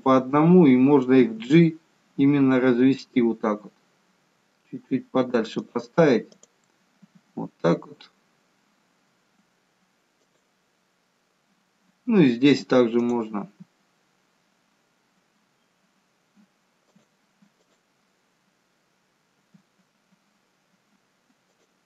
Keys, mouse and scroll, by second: 1.4 g, 6.4 click, 7.1 g, 13.1 click, 13.5 g, 17.8 click, 19.5 g.